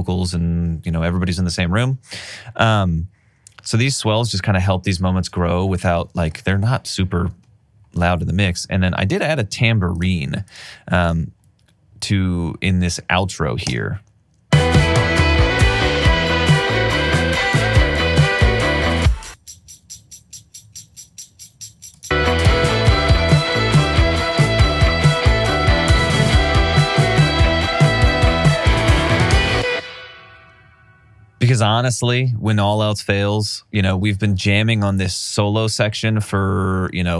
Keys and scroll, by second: 13.6 space, 23.4 r, 29.3 space.